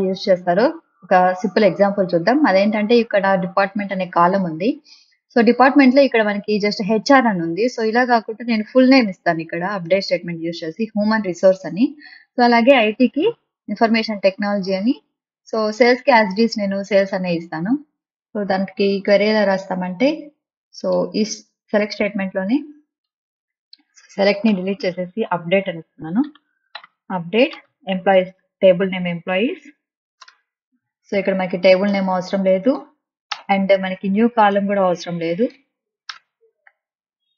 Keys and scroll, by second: 24.4-29.6 typing, 30.2 Return, 33.3 BackSpace, 36.1 BackSpace.